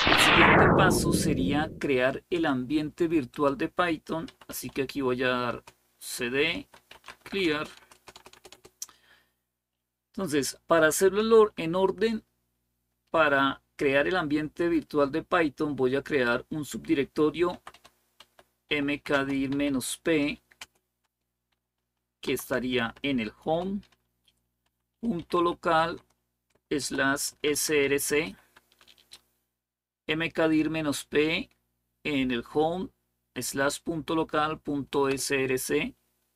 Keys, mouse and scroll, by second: 3.1 click, 3.8-7.5 typing, 5.3 Return, 7.6 Return, 7.8 Return, 8.0 Return, 17.1-20.4 typing, 22.0 typing, 23.2-28.1 typing.